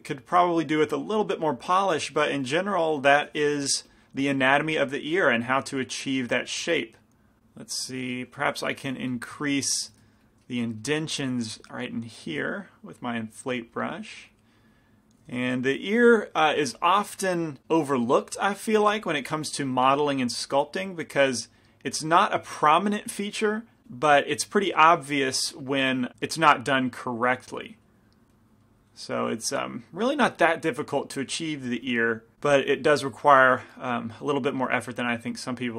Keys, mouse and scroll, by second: 3.7 g, 4.1 f, 4.7 f, 5.5-7.4 drag, 8.7 middle click, 8.7 i, 9.1 f, 9.6-11.7 middle drag, 10.2 f, 11.7-13.4 drag, 11.7-13.2 right drag, 12.6 shift+f, 13.5-17.9 drag, 15.5 f, 18.9 f, 19.1-23.8 drag, 19.8 f, 23.9 f, 24.8-26.1 middle drag, 25.6 click, 26.5-32.3 drag, 28.2-31.4 middle drag, 33.0-34.8 drag, 33.0 f, 34.5-35.7 middle drag.